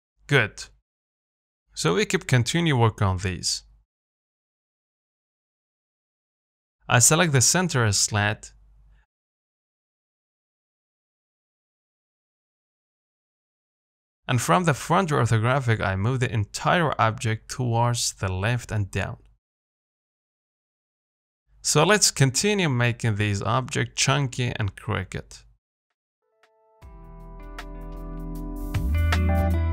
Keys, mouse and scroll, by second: 0.6-1.0 scroll up 1, 1.0-2.4 middle drag, 2.4-3.0 scroll up 1, 3.0 click, 3.1-4.4 middle drag, 4.4-4.8 scroll down 2, 4.8-7.1 shift+middle drag, 7.1 click, 7.4 scroll up 1, 7.6 shift+middle click, 7.8-8.2 scroll down 3, 8.2 middle click, 8.8 scroll up 1, 9.1-10.2 shift+middle drag, 10.2-10.5 scroll up 1, 10.5 shift+middle click, 10.8 Tab, 11.0 middle click, 11.7 scroll down 1, 11.9 a, 12.7 KP_3, 13.4 KP_1, 14.4 z, 14.6-15.0 scroll up 2, 15.0 shift+middle click, 15.7 g, 22.4 KP_7, 23.5 g, 25.8 z, 26.0 middle click, 26.6 z, 27.0 shift+middle click, 27.6 Tab, 27.8 scroll down 2, 28.1 shift+middle click, 28.2 scroll up 1, 28.3 shift+middle click, 29.2 Tab, 29.4 z.